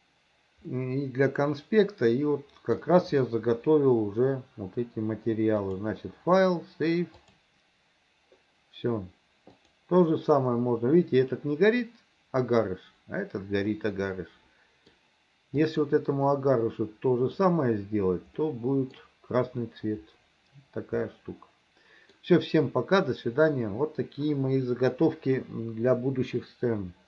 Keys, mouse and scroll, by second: 0.8-2.8 middle drag, 5.7-7.5 drag, 9.7 click, 13.8-15.0 middle drag, 15.7 click, 16.3-17.4 middle drag, 18.5 middle click, 21.1-22.2 middle drag.